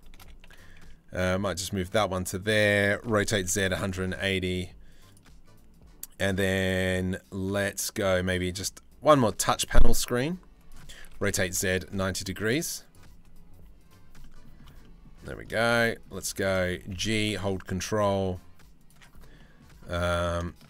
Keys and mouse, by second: 2.7 r, 4.7 click, 9.1 s, 10.6 r, 11.8 s, 13.8 middle drag, 13.8 s, 14.4 shift+middle click, 15.3 middle drag, 15.7 middle click, 16.4 g, 18.9 middle click, 19.5 middle click, 20.0 shift+middle click.